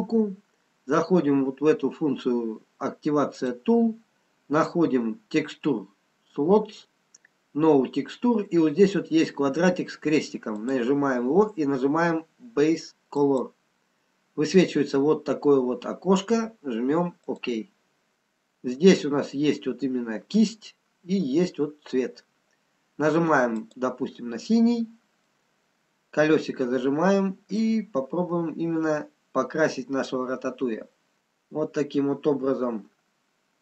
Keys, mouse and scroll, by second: 3.3 click, 10.5 click, 18.1 scroll down 3, 23.5 click, 23.5-24.1 scroll down 6, 24.6-25.1 scroll up 2, 25.1-25.5 scroll down 1, 25.8 middle click, 26.9 scroll down 2, 31.2 click, 31.2-32.5 scroll up 4.